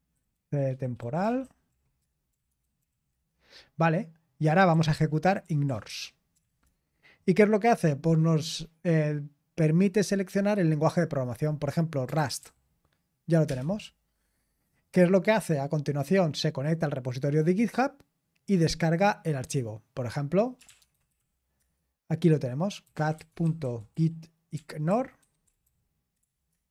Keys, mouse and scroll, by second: 0.0-7.1 typing, 8.7-9.2 typing, 11.8-13.4 typing, 15.7 typing, 20.3-26.7 typing.